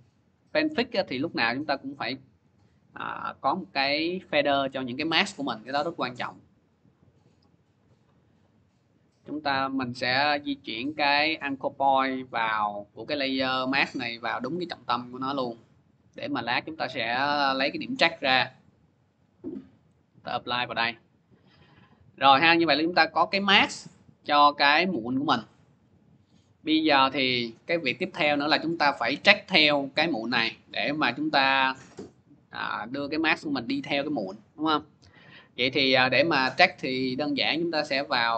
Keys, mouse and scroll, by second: 0.2 click, 2.2 click, 4.7-5.1 scroll, 5.4 middle click, 8.1 click, 8.8 click, 9.1 middle click, 10.1 scroll, 10.7 click, 13.2 click, 13.5 scroll, 17.7 click, 19.5 click, 22.7 click, 23.6 click, 27.3 click, 28.5 scroll, 31.9 click, 31.9 middle click, 35.7 click, 37.8 click.